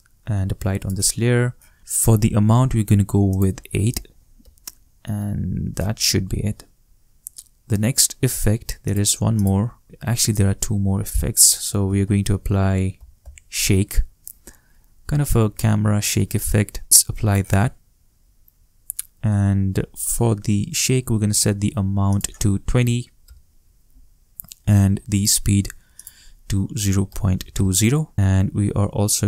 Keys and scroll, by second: 4.0 shift+8, 4.4 shift+Return, 11.6-13.7 typing, 22.5 shift+2, 22.8 shift+0, 23.2 shift+Return, 26.7-28.0 typing, 28.1 shift+Return.